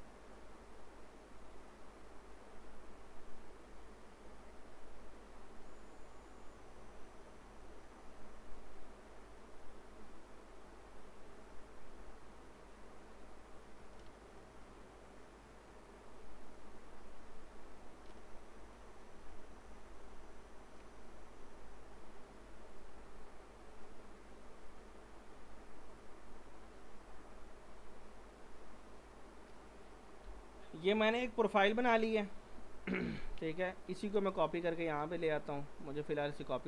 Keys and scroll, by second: 14.1 ctrl+z, 30.2 p, 31.2 z.